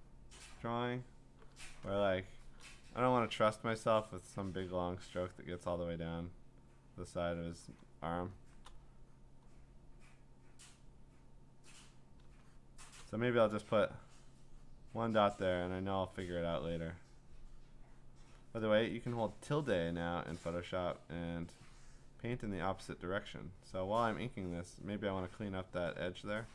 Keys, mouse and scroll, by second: 0.4 click, 1.3 click, 2.2-2.7 scroll, 2.4 click, 7.8 click, 8.5 click, 8.6 click, 8.7 click, 9.4 click, 10.0 click, 10.9 click, 11.6 click, 12.1 click, 12.9 click, 13.9 click, 14.8 click, 16.4 click, 18.1 click, 19.6-21.8 `, 21.8 click, 22.0 `, 22.2 `, 22.3 `, 23.1 click, 24.6-26.5 typing, 26.0 click.